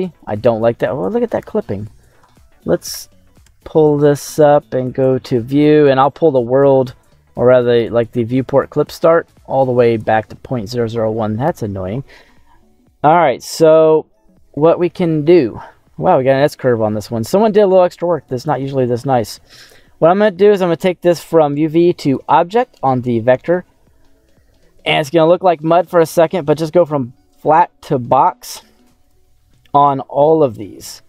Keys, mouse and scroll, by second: 0.1 middle click, 0.8-1.9 scroll up 4, 3.3 n, 7.4-9.9 drag, 11.4 n, 11.9 scroll down 1, 13.1 click, 13.7 middle click, 14.2 scroll down 1, 14.4-15.4 scroll up 5, 15.2 middle click, 16.1 middle click, 16.8-19.7 middle drag, 20.3 scroll up 2, 21.5 click, 23.1 middle click, 24.3 middle click, 26.3-27.4 drag, 27.8 middle click, 29.1-30.6 drag.